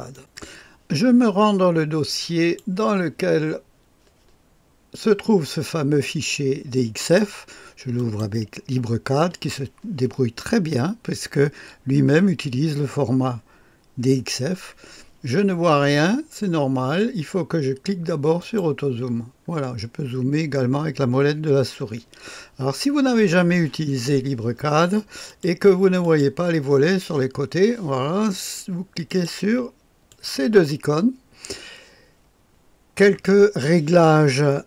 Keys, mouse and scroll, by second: 0.0 click, 2.1-3.2 drag, 6.9-7.9 right drag, 7.9 click, 18.3 click, 20.1-21.1 scroll down 1, 21.1-25.2 scroll up 1, 25.2 click, 25.9 click, 29.0 click, 30.0 click.